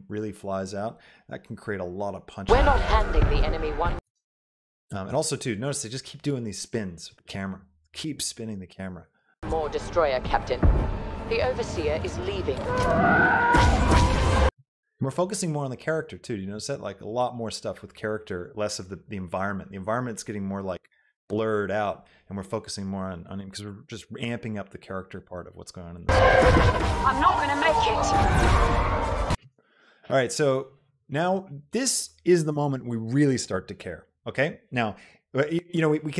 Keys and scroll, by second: 4.1 space, 9.6 space, 14.7 space, 26.1 space, 29.4 space.